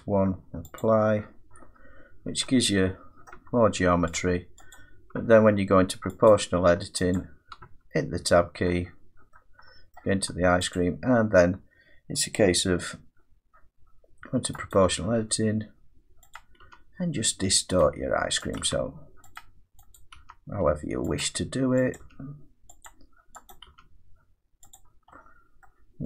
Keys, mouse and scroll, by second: 1.7-2.1 scroll up 5, 2.1 Tab, 3.3 middle click, 3.4 Tab, 4.2 click, 4.4 Tab, 4.8 click, 5.2 Tab, 6.3 click, 7.2 click, 7.7 Tab, 8.8 scroll up 2, 8.9 middle click, 10.0 middle click, 10.8 click, 14.7 click, 16.4 click, 16.7 g, 17.8 click, 18.6 click, 18.7 g, 19.4 click, 20.0 click, 20.2 g, 21.2 click, 22.0 click, 22.0 g, 22.9 click, 23.5 click, 23.7 g, 24.8 click, 25.7 middle click.